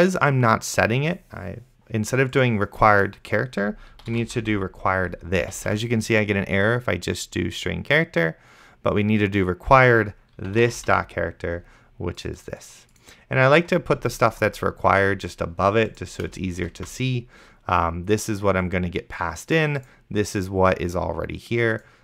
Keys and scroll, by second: 3.9-5.0 typing, 5.9 ctrl+z, 10.4-11.5 typing, 16.6 Return, 17.1 ctrl+s.